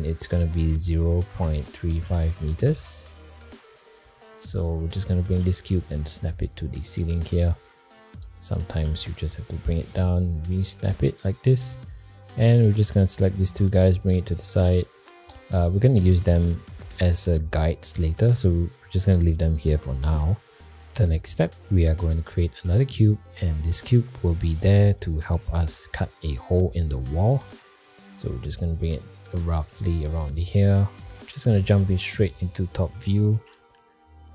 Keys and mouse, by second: 0.3-3.4 drag, 4.2 shift+middle drag, 4.6 middle drag, 5.4 g, 7.9 g, 8.8 g, 12.3 shift+click, 12.9-13.2 middle drag, 13.5 g, 15.3 middle click, 16.5 shift+middle click, 17.0 middle click, 18.0 click, 21.3 click, 22.5 shift+a, 26.1 middle click, 27.3 g, 28.3 middle click, 28.8 g, 31.5 alt+middle click, 32.7 shift+middle drag, 33.3 alt+z.